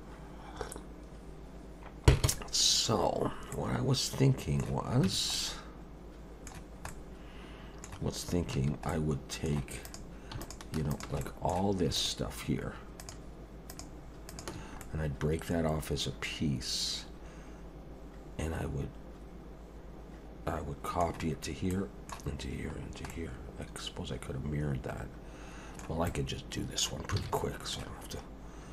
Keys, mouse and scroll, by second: 3.5 middle click, 5.0 Tab, 5.3 middle click, 6.9 middle click, 8.5 3, 8.9 middle click, 9.8 click, 10.4 shift+click, 10.9 click, 11.2 middle click, 12.0 shift+click, 13.0 shift+click, 13.7 shift+click, 14.3 shift+click, 14.8 middle click, 21.7 middle click, 22.8 scroll down 1, 23.1 middle click, 26.1 middle click, 27.2 alt+a, 27.4 middle click.